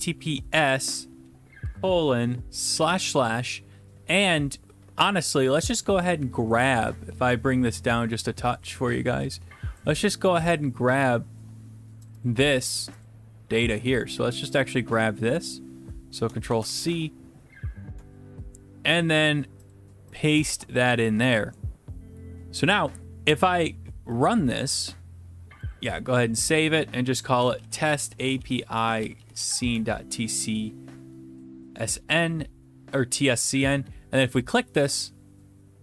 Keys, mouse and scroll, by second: 0.0-0.1 typing, 1.6 typing, 2.7 /, 2.9 /, 5.8 click, 9.8 click, 12.1 click, 12.2 click, 13.1 click, 16.1 click, 16.5 ctrl+c, 16.9 alt+Tab, 20.2 shift+click, 20.5 ctrl+v, 24.2 click, 25.7 click, 26.7 click, 27.3-29.6 typing, 29.6 Return, 34.3 click.